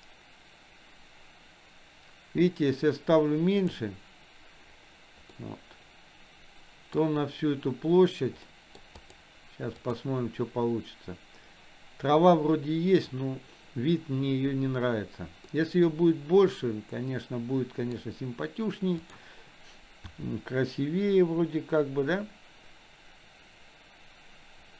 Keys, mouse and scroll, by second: 5.6-7.2 middle drag, 8.7 middle click, 9.2 drag, 10.1 click, 15.7-18.3 middle drag, 19.2 drag, 20.2 r.